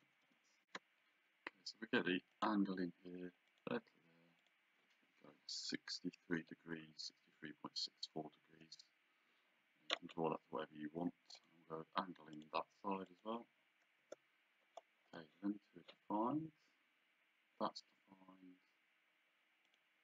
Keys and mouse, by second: 0.6 shift+z, 2.3 click, 3.5 click, 8.5 Return, 11.4 click, 14.0 Return, 19.7 click.